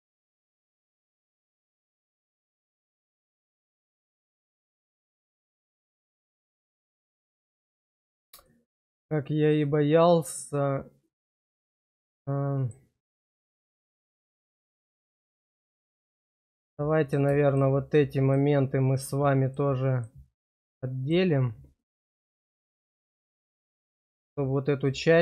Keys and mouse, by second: 1.1-2.7 middle drag, 5.4 click, 6.0 click, 6.7 click, 7.8 shift+middle click, 8.5-11.3 middle drag, 11.5 shift+middle click, 12.2 middle click, 13.5 shift+middle click, 14.3 middle click, 15.0 shift+middle click, 17.0 click, 17.4 shift+click, 19.4 shift+click, 20.4 shift+click, 20.9 shift+click, 23.8 shift+middle click.